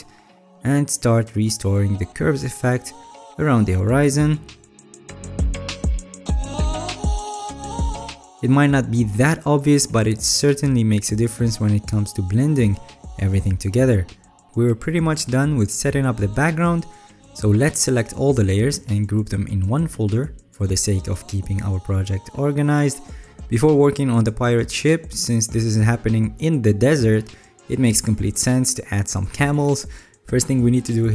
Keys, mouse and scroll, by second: 0.6-1.2 alt+scroll, 1.2 alt+scroll, 2.5 alt+right click, 6.0 alt+right click, 7.1 alt+scroll, 7.9 alt+scroll down 10, 10.6-11.5 alt+scroll down 6, 11.5-16.8 alt+scroll down 3.